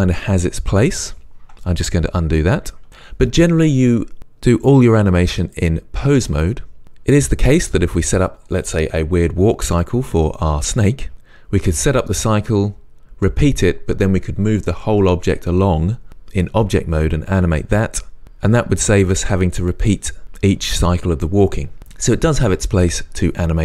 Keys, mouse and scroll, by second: 2.5 ctrl+z, 5.5-23.6 drag.